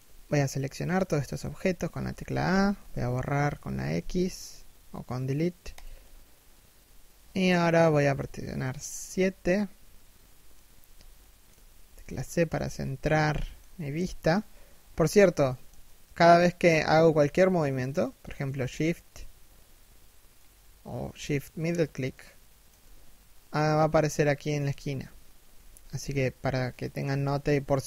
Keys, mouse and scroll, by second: 1.8 a, 3.5 x, 7.7 KP_7, 10.5 shift+middle click, 11.1 c, 11.5 shift+middle click, 14.6 shift+middle click, 17.4 shift+middle click, 19.9 shift+middle click, 21.4 shift+middle click, 25.5 KP_1, 26.5 KP_7.